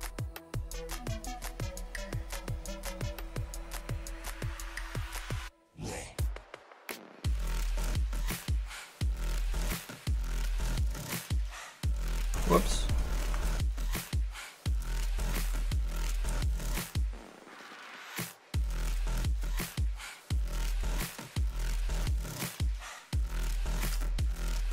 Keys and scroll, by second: 0.2 s, 1.6 s, 2.8 s, 6.4 s, 21.8 s.